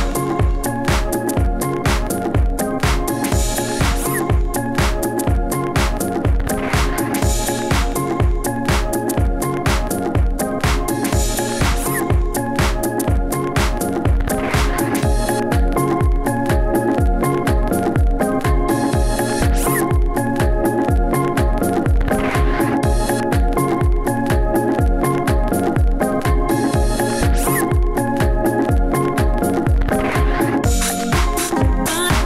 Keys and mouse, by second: 0.7 f, 1.2 s, 1.3 f, 3.8 s, 4.4 s, 5.6 s, 6.3 f, 7.0 f, 8.6 f, 9.8 ctrl+z, 9.9 ctrl+z, 10.1 shift+f, 10.2-10.5 drag, 10.8 f, 12.6 s, 14.1 click, 14.7 ctrl+s, 16.2 s, 17.0-17.8 drag, 17.9 f, 21.7 f, 22.0 f, 31.9 f.